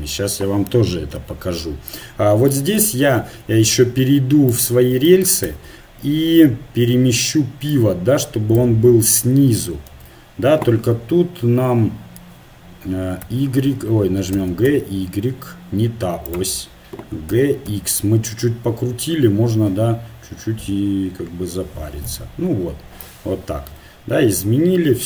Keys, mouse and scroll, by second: 1.2 KP_1, 3.3 Tab, 4.4-7.5 right drag, 5.5 Tab, 9.9 ctrl+z, 13.2 y, 14.4 g, 17.3 g, 22.8 middle click, 24.1 Tab.